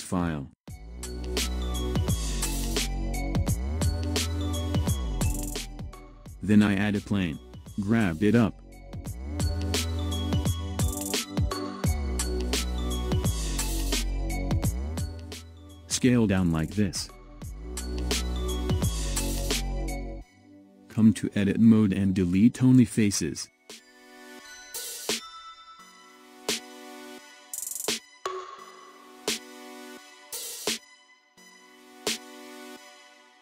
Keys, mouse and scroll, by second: 0.9 scroll up 2, 1.7-3.9 shift+middle drag, 3.9 shift+a, 8.7 click, 13.5-14.3 scroll up 4, 14.3-14.9 scroll up 1, 14.9 s, 19.8 Tab, 20.7-22.3 middle drag, 22.3 x, 26.9 Tab, 31.0 Tab.